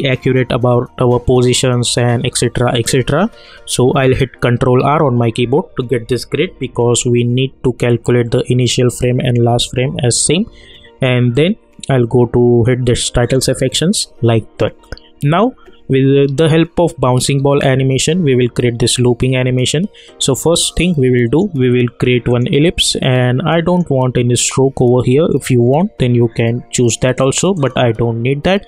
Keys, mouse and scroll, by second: 4.6 ctrl+r, 11.3 click, 16.2 click, 20.8-22.3 drag, 27.5-28.6 drag.